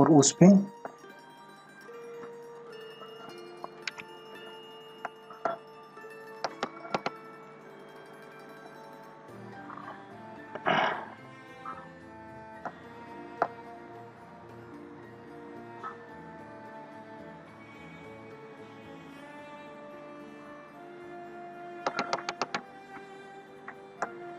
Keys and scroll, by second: 6.4 ctrl+alt+z, 20.5 ctrl+=, 21.9 ctrl+alt+z, 23.2 ctrl+=, 24.0 c.